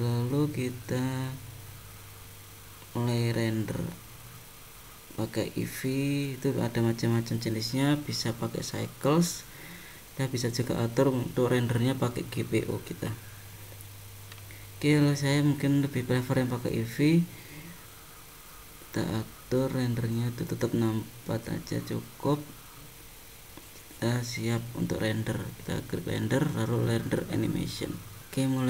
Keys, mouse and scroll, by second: 1.0 click, 2.1-2.5 scroll up 2, 2.7-3.7 scroll up 7, 4.7 click, 6.0 click, 7.6 click, 10.4 click, 15.7 click, 21.7 scroll down 3, 22.3-23.0 scroll up 6, 25.6 click.